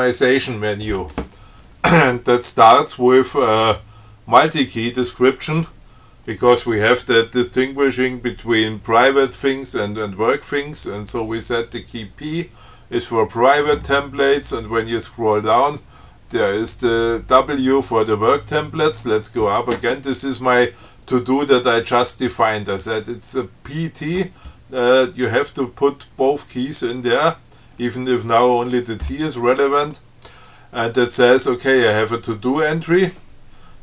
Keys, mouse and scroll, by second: 14.5-15.3 scroll down 4, 15.7-16.5 scroll up 4, 18.4-19.1 scroll up 2.